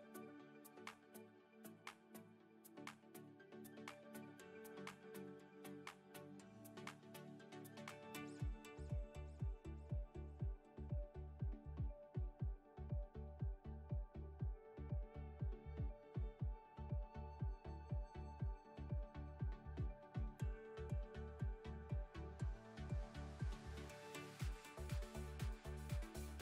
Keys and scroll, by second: 1.4 alt+z, 7.3 Tab, 8.4 ctrl+r, 10.6 Tab, 12.4 Tab, 13.6 3, 15.2 i, 22.5 Tab.